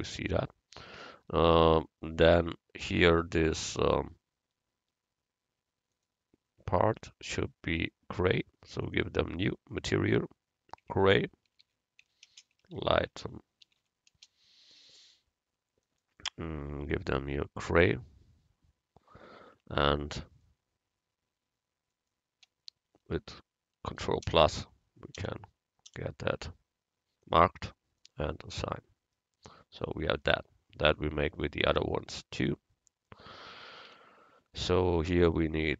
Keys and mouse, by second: 6.0-7.8 drag, 8.9-11.6 drag, 15.9-17.9 drag, 19.5 Tab, 22.0 click, 24.3 ctrl+KP_Add, 28.0 click, 28.7 Tab, 31.0-32.6 drag, 33.9 Tab.